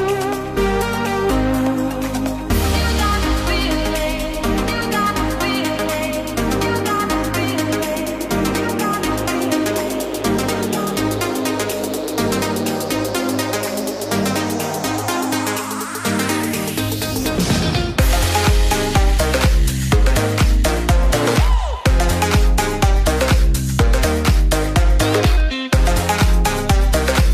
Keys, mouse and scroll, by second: 3.2 click, 4.5 click, 10.8 drag, 21.6 click.